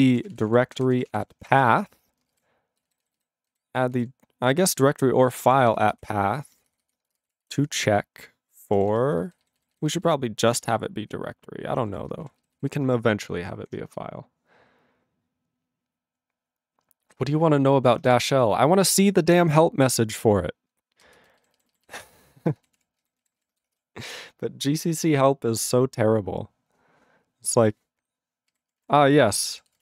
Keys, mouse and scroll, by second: 0.0-3.0 typing, 3.1 alt+b, 3.2 alt+b, 3.5 alt+b, 3.9 alt+f, 4.7-8.9 typing, 6.4 alt+f, 9.4 alt+b, 9.6 alt+b, 9.8 alt+b, 9.9 alt+b, 10.6 alt+b, 11.0 alt+f, 11.8 alt+d, 12.4 ctrl+e, 12.4 ctrl+b, 12.6 ctrl+b, 13.7 ctrl+f, 19.7 ctrl+f, 21.0 ctrl+space, 21.5 ctrl+alt+b, 21.6 ctrl+alt+b, 21.7 ctrl+alt+b, 21.9 ctrl+alt+b, 22.0 ctrl+alt+b, 22.3 ctrl+alt+b, 22.6 ctrl+g, 22.8 ctrl+e, 23.0 ctrl+b, 23.5 ctrl+s.